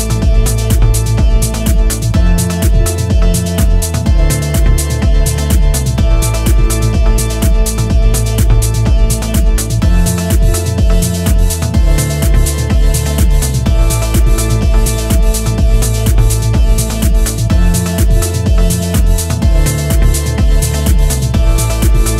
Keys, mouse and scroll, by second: 0.4 ctrl+r, 4.2 ctrl+r, 6.7 ctrl+r, 10.9 ctrl+r, 14.0 ctrl+r, 17.3 ctrl+r, 20.8 middle click, 21.9 Tab.